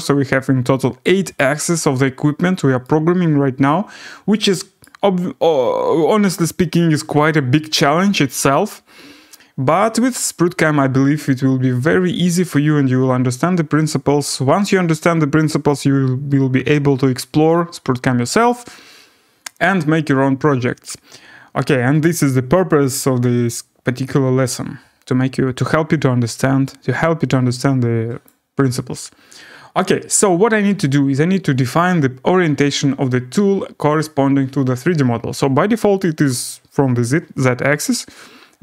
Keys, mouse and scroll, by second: 1.4 right click, 2.4 scroll, 4.8 right click, 6.5-7.1 scroll, 8.0 scroll, 8.1 middle click, 8.6 middle click, 18.5-23.5 right drag, 28.2-33.3 drag.